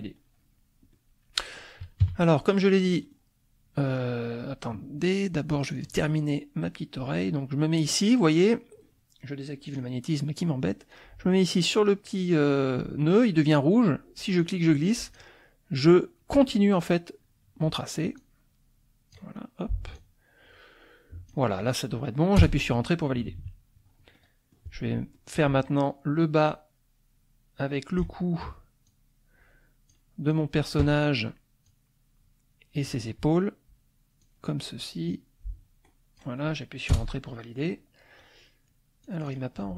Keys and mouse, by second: 0.9 click, 2.0 KP_Subtract, 2.8 click, 3.9 click, 5.7 click, 9.7 click, 14.4 click, 18.2-19.3 drag, 19.9-21.5 drag, 22.4 Return, 23.2 KP_Subtract, 24.2 click, 25.1 click, 26.5-28.1 drag, 28.9-30.1 drag, 30.3 click, 31.6-33.0 drag, 34.2-36.4 drag, 36.9 Return, 39.0 click.